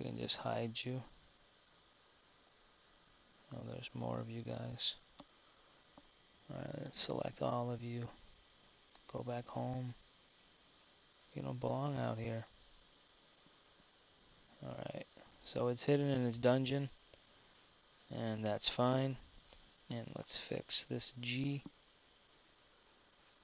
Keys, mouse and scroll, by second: 1.4-3.5 drag, 3.7 super+z, 6.2 b, 9.6-12.9 drag, 14.4 z, 15.7 z, 17.0 Tab, 19.0 KP_1, 21.8 KP_1, 22.9 z.